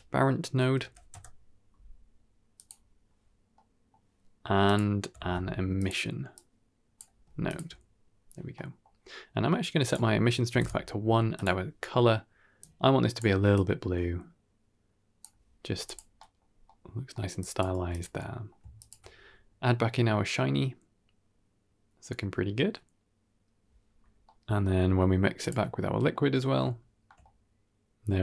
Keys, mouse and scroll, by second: 3.4 middle click, 4.5 click, 5.1 shift+d, 6.2-6.8 drag, 7.4 ctrl+shift+click, 8.4 middle drag, 9.1-9.7 scroll up 2, 9.7 click, 11.2 click, 15.7 click, 16.0 middle click, 16.3 scroll down 2, 16.5 middle click, 17.0 middle click, 17.3 drag, 17.6 g, 18.0 middle click, 18.7 ctrl+shift+click, 19.5-23.7 middle drag, 24.0 scroll down 1, 24.1-28.2 middle drag, 25.4 ctrl+shift+click.